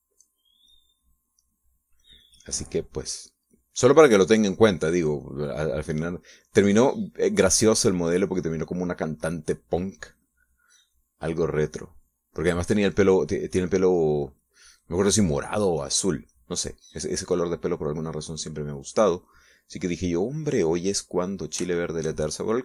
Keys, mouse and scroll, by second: 21.8 middle click.